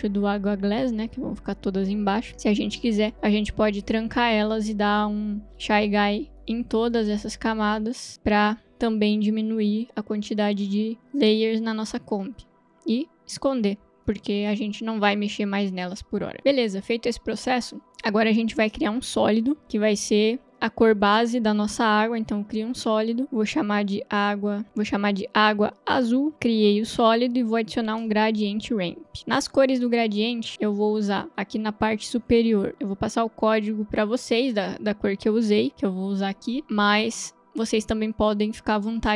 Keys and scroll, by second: 22.5 ctrl+y, 24.3-26.8 typing, 28.2 ctrl+space, 28.3-29.6 typing, 35.7 ctrl+c.